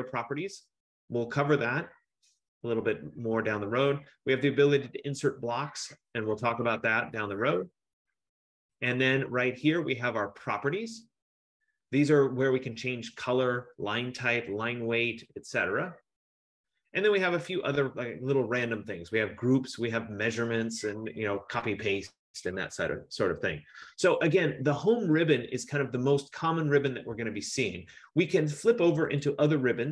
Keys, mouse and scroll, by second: 1.1 F15, 29.4 click.